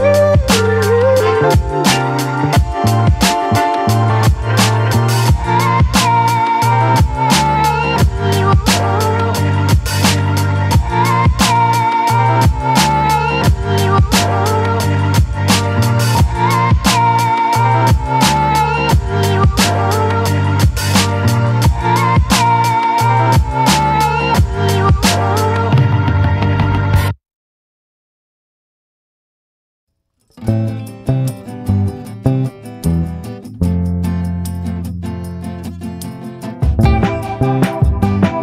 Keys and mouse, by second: 0.3 click, 1.3 click, 2.0 ctrl+z, 3.1 click, 3.9 click, 4.7 ctrl+z, 5.8 click, 7.2-7.8 ], 7.8-13.5 drag, 13.5 a, 14.8 click, 16.2 ctrl+z, 22.6 click, 22.9 ctrl+z, 23.9 click, 24.3 click, 24.6 ctrl+z, 24.8 click, 25.1 ctrl+z, 25.6-28.6 typing, 26.3 click, 27.0 click, 27.9 click, 28.2 ctrl+z, 28.3 ctrl+z, 28.8-30.1 drag, 31.1-34.9 typing, 31.2 click, 32.2 click, 32.8 ctrl+z, 33.1 click, 35.0 click, 37.0-38.0 middle drag, 38.2 middle click.